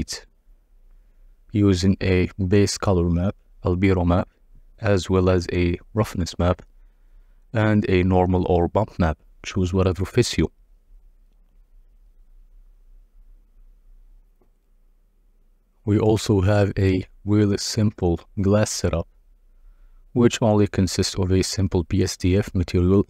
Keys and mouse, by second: 3.0-6.5 drag, 9.2 click, 14.4 KP_Divide, 17.4 click, 18.6-21.2 drag.